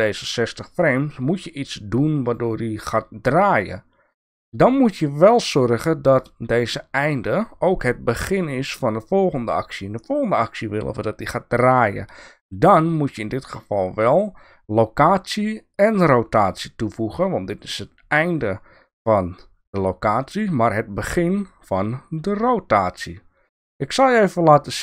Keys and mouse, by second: 0.2 click, 1.1-2.3 drag, 4.7-6.1 drag, 13.3 click, 16.3 click.